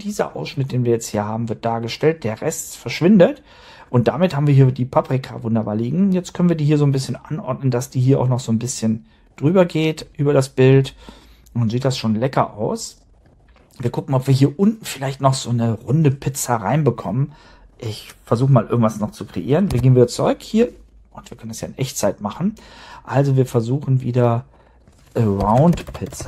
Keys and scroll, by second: 19.6 super+Tab, 25.4-26.2 typing.